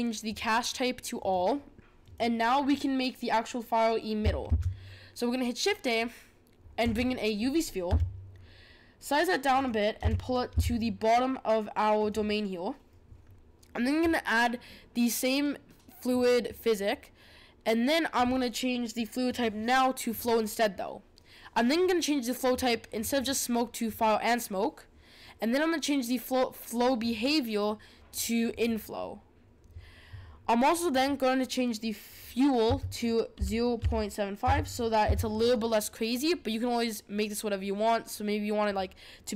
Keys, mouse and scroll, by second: 0.2-2.1 drag, 4.4 shift+a, 7.8 s, 10.0 g, 16.1-19.1 drag, 19.2-22.4 drag, 23.1-26.2 drag, 27.0-30.0 drag, 30.8-34.0 drag.